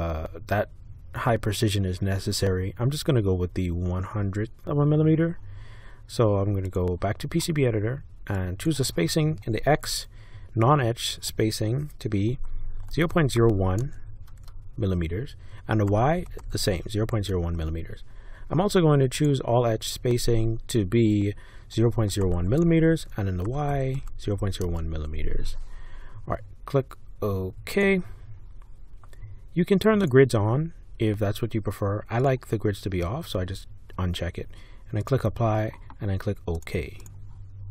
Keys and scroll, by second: 12.9 0, 13.4 1, 13.8 Tab, 15.6-17.0 typing, 17.4 Tab, 21.5-24.9 typing.